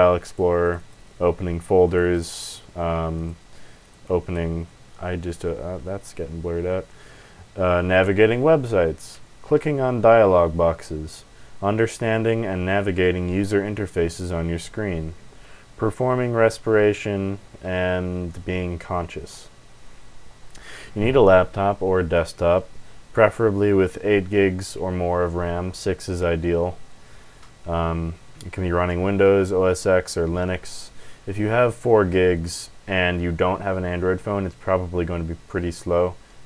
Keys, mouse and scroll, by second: 0.2 click, 0.6 click, 0.7 click, 1.8 click, 2.0 click, 3.1 click, 3.8 click, 5.6 alt+F4, 20.3 scroll down 2.